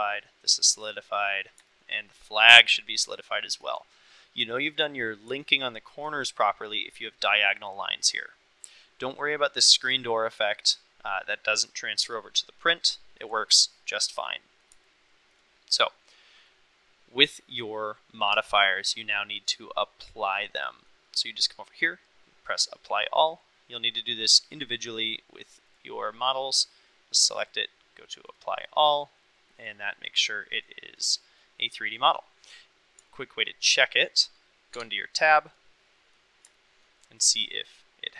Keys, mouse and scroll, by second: 0.9 middle drag, 1.7-2.1 shift+middle drag, 2.7-3.0 middle drag, 3.2-3.7 shift+middle drag, 5.5-6.0 shift+middle drag, 8.7-9.1 middle drag, 11.7-12.1 middle drag, 13.0 shift+middle drag, 13.4 middle drag, 14.4 middle drag, 14.9-15.4 shift+middle drag, 15.7-16.2 middle drag, 18.4 click, 20.4-20.9 middle drag, 24.9 click, 26.6 click, 27.5 click, 28.7 middle click, 29.6 click, 30.7 click, 31.1 click, 31.5-31.8 middle drag, 32.1 middle click, 32.5 click, 33.1-33.8 shift+middle drag, 34.8 Tab, 35.5 middle click, 36.6 shift+middle click, 37.9-38.1 middle drag.